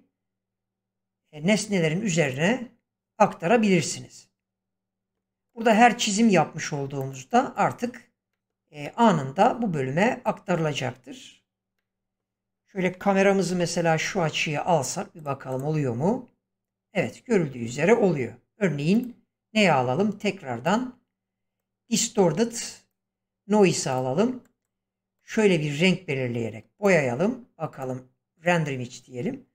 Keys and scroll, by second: 13.5 ctrl+alt+0, 17.6 Escape.